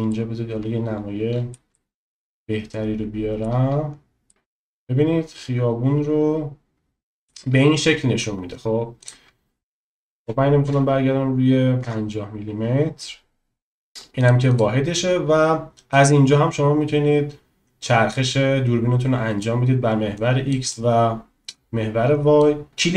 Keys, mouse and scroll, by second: 0.2 middle click, 1.8 shift+middle click, 4.9 middle click, 8.9-12.1 drag, 14.2 click, 15.9 middle click, 16.1-17.1 drag, 17.1 middle click, 17.2 click, 17.8 middle click, 17.9-19.6 drag, 20.6 middle click, 21.3-22.5 drag.